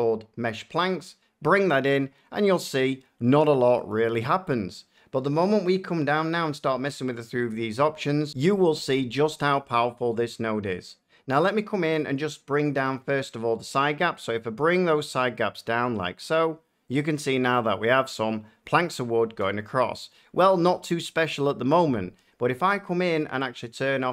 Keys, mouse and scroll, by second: 0.8 click, 2.1-2.9 drag, 3.3-5.8 middle drag, 16.9-18.1 drag, 18.1 middle click.